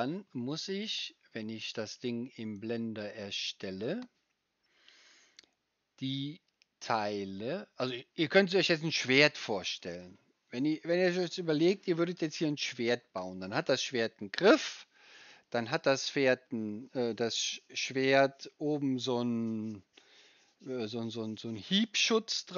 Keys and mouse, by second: 0.0-22.5 drag, 0.0-22.5 right drag.